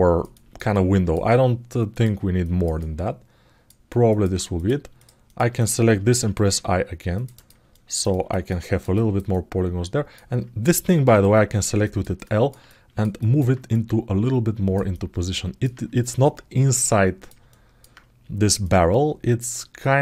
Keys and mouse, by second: 0.1 ctrl+alt+middle click, 0.5 alt+middle click, 1.7 click, 2.2 alt+middle click, 2.5 ctrl+alt+middle click, 3.8 alt+middle click, 4.3 click, 5.0 shift+click, 5.3 shift+click, 7.5 ctrl+alt+middle click, 8.2 alt+middle click, 8.7 alt+shift+middle click, 9.0 alt+middle click, 11.6 alt+middle click, 12.0 alt+middle click, 12.4 ctrl+alt+middle click, 12.9 alt+middle click, 13.5-14.5 drag, 14.7 alt+middle click, 15.8-17.0 drag, 17.2 alt+middle click, 18.4 alt+middle click, 19.5 alt+middle click.